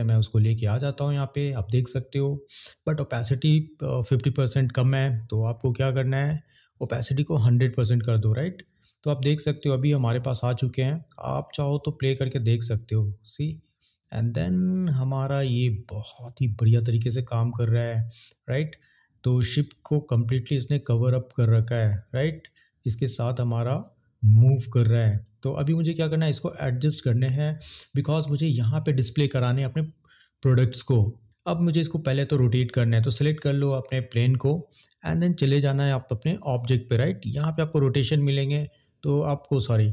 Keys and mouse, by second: 7.0 click, 11.2 click, 12.1 click, 24.9 click, 32.0 click, 38.1-39.7 drag.